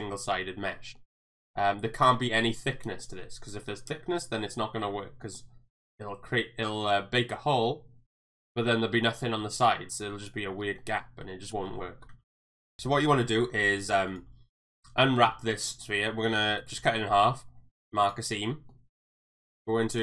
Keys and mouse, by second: 1.0 middle click, 1.8 middle click, 3.0 middle click, 3.9 shift+middle click, 5.2 shift+middle click, 8.3 middle click, 10.8 middle click, 11.5 shift+middle click, 12.2 ctrl+z, 12.7 ctrl+z, 12.9 Tab, 14.0 alt+click, 16.5-18.1 right drag, 18.5 middle click, 19.1 a.